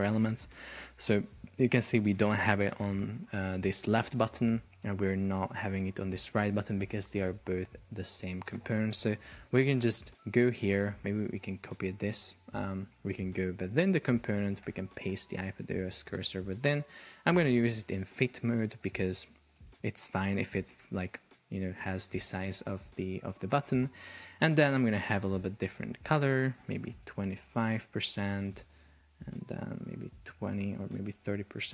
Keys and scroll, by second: 8.0 Escape, 11.9 super+c, 14.6 super+v, 20.8 shift+super+4, 22.0 Escape, 27.5 Return, 30.7 BackSpace, 31.1 Return.